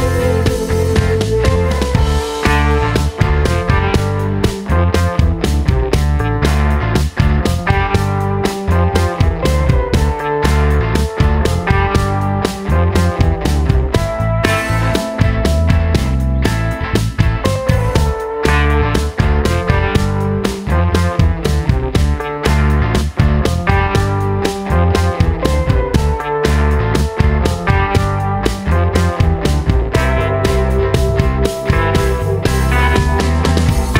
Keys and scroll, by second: 12.8 super+c, 12.9 super+v, 21.4 super+d, 33.0 d.